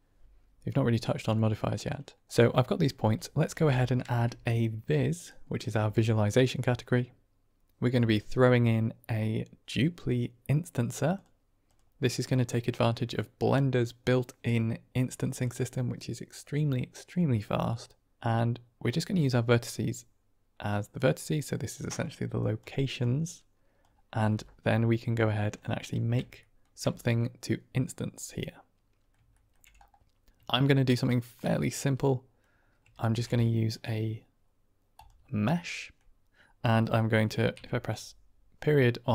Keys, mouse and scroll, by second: 1.2-2.2 middle drag, 2.5 middle click, 3.1 click, 3.5 g, 4.0 shift+a, 12.4-15.3 drag, 18.7-20.9 drag, 21.7 middle click, 22.3 drag, 22.9 click, 25.8-26.5 shift+middle drag, 27.1-29.0 middle drag, 29.3 shift+middle click, 30.7 shift+middle click, 31.5-32.3 middle drag, 32.9 shift+a, 35.5-35.9 drag, 37.4 KP_Decimal.